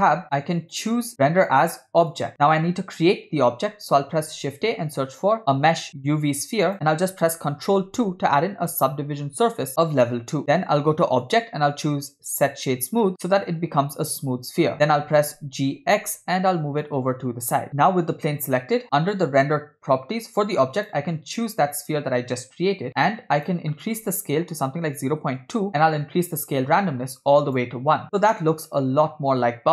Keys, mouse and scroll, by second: 0.8-2.3 drag, 4.3 shift+a, 10.4 ctrl+2, 11.3-13.1 drag, 13.9-15.4 scroll down 5, 14.7-15.4 scroll up 2, 15.4 g, 17.7 click, 17.7-18.2 scroll down 3, 18.8-19.3 scroll down 8, 20.8-22.2 drag, 23.4-25.6 drag, 26.7-28.0 drag, 28.0 scroll up 3, 28.5 space.